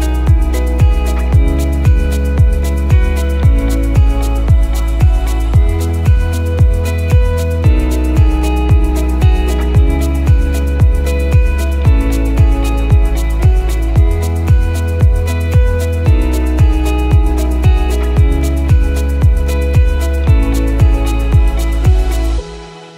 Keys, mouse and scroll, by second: 0.2 click, 5.4 click, 6.8 click, 11.9 click, 13.7 KP_1, 17.1 click, 18.4 click, 21.9 click, 22.5-22.8 scroll up 4, 22.8 click.